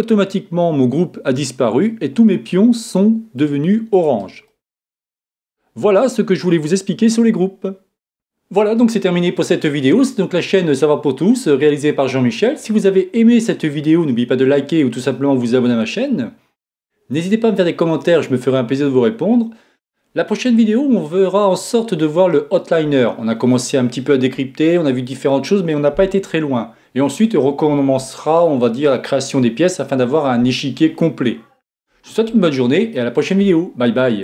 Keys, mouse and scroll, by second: 2.2-6.2 middle drag, 4.1-5.7 right drag, 6.3 middle click.